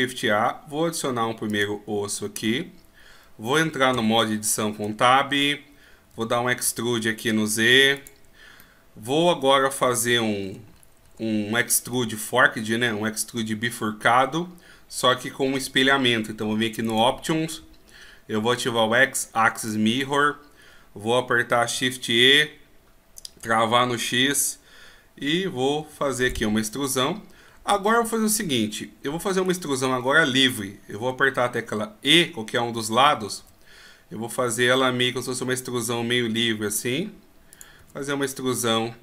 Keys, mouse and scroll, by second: 2.1-3.0 scroll up 6, 3.9 Tab, 4.9-5.2 shift+scroll up 1, 6.1 e, 8.6 middle click, 9.9 KP_1, 10.6-11.8 shift+scroll up 1, 12.2-13.1 ctrl+scroll up 1, 16.8 click, 19.5 click, 22.2 shift+e, 26.7-27.1 scroll down 1, 27.1-27.8 scroll up 1, 27.8-29.4 scroll up 2, 29.4 right click.